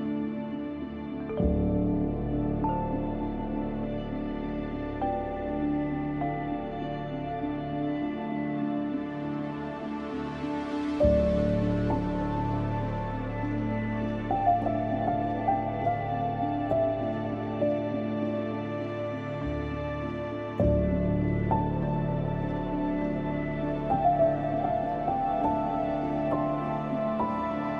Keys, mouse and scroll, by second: 3.3 scroll down 1, 4.5-5.3 scroll up 1, 5.3-6.4 scroll down 2, 7.6-9.8 scroll up 1, 9.8-10.4 scroll down 1, 10.4-12.1 scroll up 1, 12.3-14.0 scroll down 1, 15.2 ctrl+Num_Lock, 15.2-18.5 ctrl+drag, 18.5 ctrl+shift+e, 19.6 scroll up 2, 20.6-21.5 scroll down 1, 21.9 ctrl+a, 27.5 click.